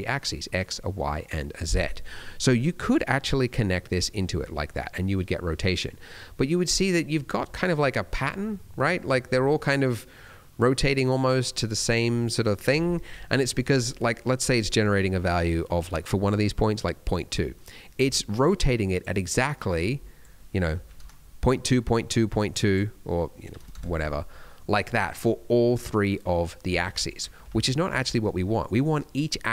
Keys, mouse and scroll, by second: 1.8 middle click, 2.6 click, 4.3-4.6 scroll down 2, 4.6 middle click, 5.2 scroll up 2, 5.6 middle click, 9.8 middle click, 10.4 middle click, 11.4 middle click, 13.4 middle click, 13.7 scroll up 1, 16.2 scroll up 1, 17.5 middle click, 18.8 click, 19.7 click, 22.5 click, 24.4 middle click, 24.6 scroll down 1, 26.8 ctrl+z, 27.4 ctrl+z, 28.0 middle click.